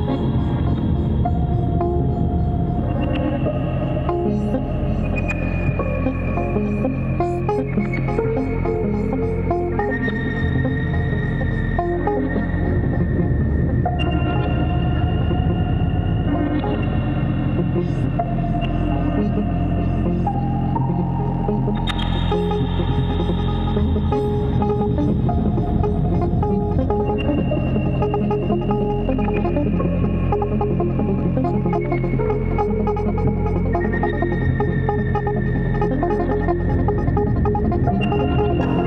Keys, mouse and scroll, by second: 3.4 click, 6.7 Return, 21.5 ctrl+d, 24.6 ctrl+=, 25.5 ctrl+=, 32.7 alt+click, 38.2 ctrl+click.